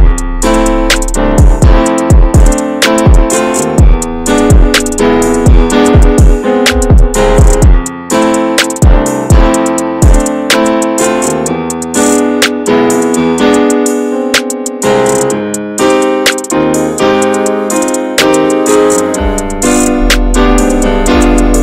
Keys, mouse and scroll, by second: 0.3 f, 4.1 scroll down 2, 4.5 ctrl+z, 4.8-8.8 scroll up 1, 10.4 click, 11.0-11.7 scroll down 9, 11.7 shift+middle click, 12.0 scroll up 1, 12.2-12.5 scroll down 1, 12.5 shift+middle click, 13.3-14.0 scroll up 4, 13.5 shift+middle click, 14.0 alt+middle click, 14.3 scroll up 2, 14.6 shift+middle click, 15.1-15.7 shift+scroll up 3, 21.3 click.